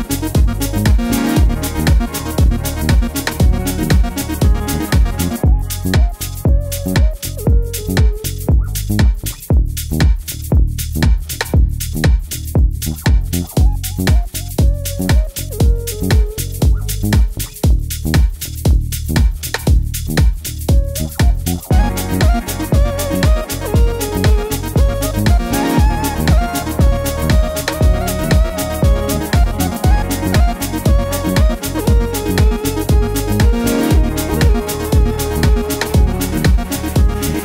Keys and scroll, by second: 3.4 4, 3.5 Return, 13.7 super+c, 13.8 super+v, 26.5 super+c, 26.5 super+v.